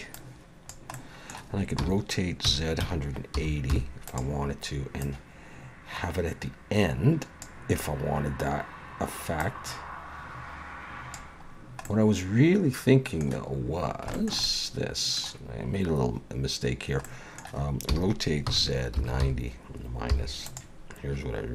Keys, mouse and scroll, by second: 0.1 click, 0.9 middle click, 1.8 r, 5.0 click, 7.8 scroll up 3, 9.4 click, 11.5-11.9 scroll down 1, 11.9 middle click, 13.8 scroll down 1, 14.1 shift+middle click, 14.4 middle click, 17.0 middle click, 17.1 shift+middle click, 17.9 r.